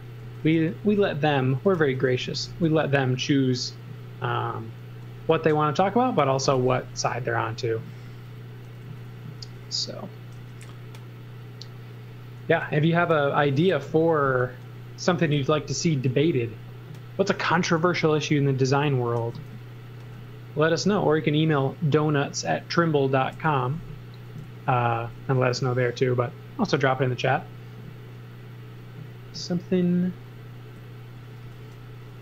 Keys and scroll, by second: 0.2-3.0 typing, 8.8 z, 9.4 space, 10.3 b, 11.4 b, 14.2-16.1 typing, 17.4 space, 19.2 e, 23.5 x, 24.4 z, 25.3 e, 31.2-32.2 typing.